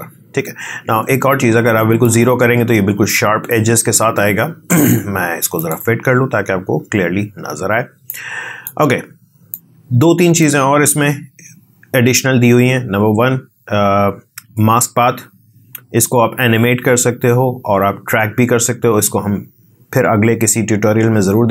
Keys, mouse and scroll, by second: 2.0-7.8 drag, 8.0-11.7 drag.